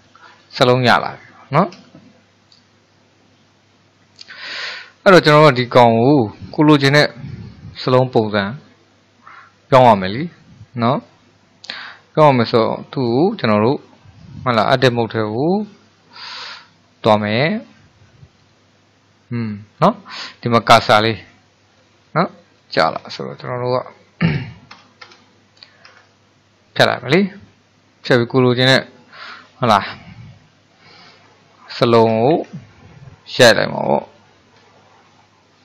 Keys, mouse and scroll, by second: 0.4-1.3 scroll up 4, 1.3-14.2 shift+middle drag, 17.2-20.3 drag, 24.3 BackSpace, 24.7 BackSpace, 25.1 BackSpace, 25.9 BackSpace, 31.0 l, 32.1 BackSpace, 32.9 l, 34.3 f, 34.6 e.